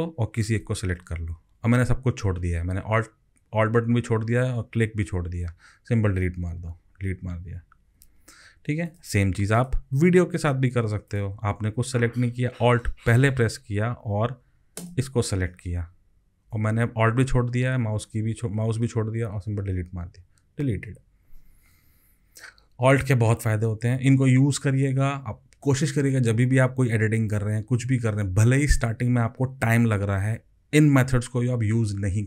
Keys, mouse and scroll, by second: 0.3 alt+click, 6.3 Delete, 8.0 ctrl+z, 14.8 alt+click, 19.6 Delete.